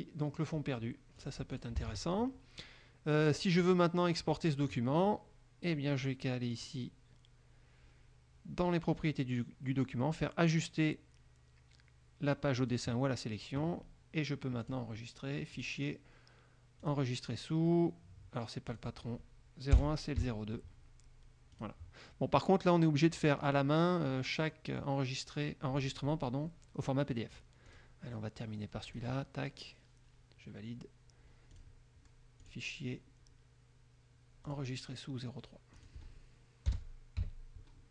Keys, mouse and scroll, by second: 1.4 click, 1.8 click, 2.0 alt+Tab, 3.8 click, 6.7 click, 12.8 click, 14.8 click, 15.8 click, 17.0 click, 18.8 click, 19.9 BackSpace, 20.4 KP_2, 21.7 click, 23.6 click, 24.6 click, 27.8 click, 29.1 click, 31.7 click, 32.6 click, 34.6 click, 36.0 click, 36.9 BackSpace, 37.3 3.